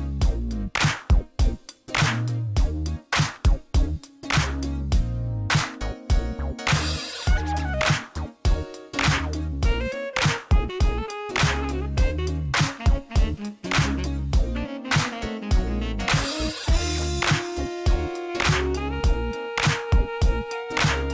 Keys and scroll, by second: 0.2 shift+z, 1.7 Tab, 2.9 1, 3.4 Tab, 3.6 shift+z, 4.3 ctrl+r, 5.1 g, 6.0 g, 7.5 Tab, 8.8 ctrl+l, 10.1 ctrl+p, 10.6 shift+z, 11.4 alt+a, 13.0 ctrl+z, 14.6 alt+a, 15.1 space, 20.3-21.1 typing.